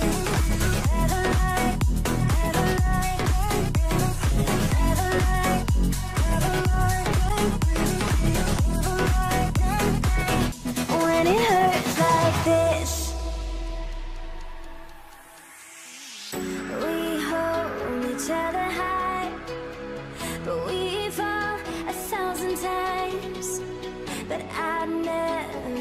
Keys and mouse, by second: 0.7 shift+f, 0.8 shift+click, 2.1 shift+click, 2.6 middle click, 3.1 shift+click, 3.6 f, 3.7 alt+a, 4.0 1, 5.3 middle click, 5.9-7.6 drag, 7.6 middle click, 8.4 shift+click, 8.9 m, 9.9 alt+a, 10.3-14.5 middle drag, 14.6 click, 15.3 middle click, 16.6 shift+click, 16.6 3, 17.3 f, 17.4 alt+a, 17.6 1, 17.8 click, 18.5-21.6 middle drag, 21.6 alt+a, 22.6-24.9 middle drag, 24.9 click.